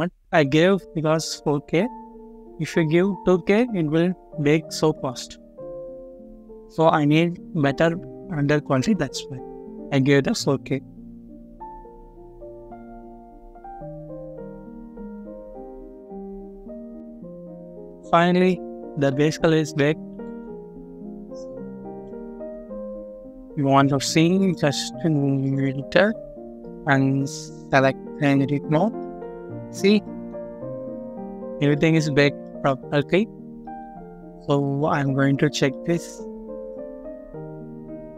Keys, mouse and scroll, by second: 1.1-1.4 scroll up 1, 17.5 scroll up 1, 18.3 middle click, 19.7-20.0 scroll down 1, 20.0 middle click, 20.6-21.0 scroll up 1, 21.0-21.8 scroll down 1, 21.8 middle click, 28.8 middle click, 29.3-29.6 scroll up 1, 29.8 middle click, 30.3-30.8 scroll up 1, 30.8 middle click, 32.0 scroll down 1, 32.2 middle click, 32.7-33.4 scroll up 1, 33.4 middle click, 33.6 scroll up 1, 33.8 scroll down 1, 34.6 middle click, 35.0 scroll down 1, 35.5 middle click.